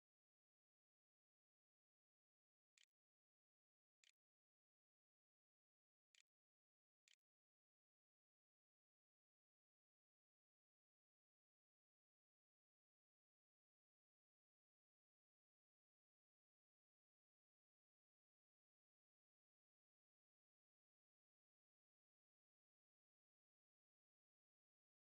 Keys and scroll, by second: 1.4-4.3 typing, 6.5 ctrl+z, 6.8 ctrl+s, 7.2-8.3 typing.